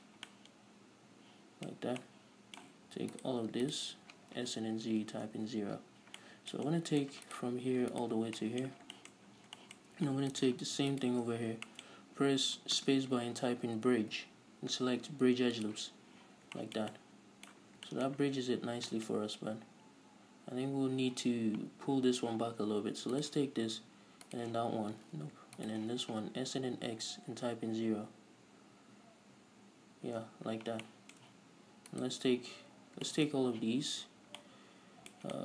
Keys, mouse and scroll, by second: 0.4 scroll down 1, 2.1 scroll up 1, 3.5 right click, 4.2 ctrl+right click, 4.5 s, 5.8 Return, 6.6-7.6 middle drag, 7.6 right click, 8.5 ctrl+right click, 8.7-10.7 middle drag, 9.1 scroll down 2, 9.6-10.7 scroll up 4, 10.7 shift+right click, 11.5 ctrl+shift+right click, 11.8-23.5 shift+middle drag, 11.8 scroll down 2, 13.1 space, 16.7 scroll down 2, 18.0 scroll down 2, 20.8-23.5 scroll up 2, 23.5 right click, 24.6 shift+right click, 25.6 ctrl+z, 26.0 shift+right click, 26.6 s, 30.6 Return, 31.2-32.3 shift+middle drag, 32.3-33.4 right drag, 33.4-35.4 shift+middle drag, 34.0 z.